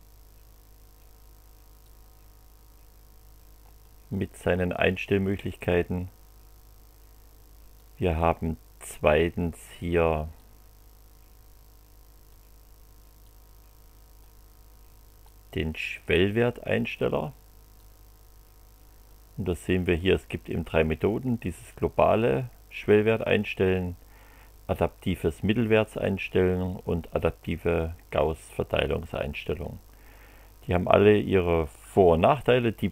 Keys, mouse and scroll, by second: 0.0 click, 1.8-4.0 drag, 7.7-9.2 drag, 10.3-12.5 drag, 13.2 click, 15.2-17.1 drag, 17.8-19.3 drag.